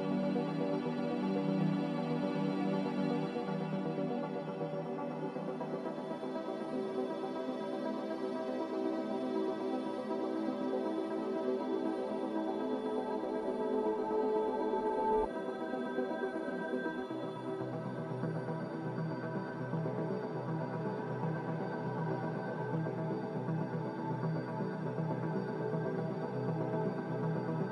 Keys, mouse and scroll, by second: 4.1 Delete, 5.5 ctrl+z, 6.0 ctrl+z, 14.0 Delete, 20.1 Delete.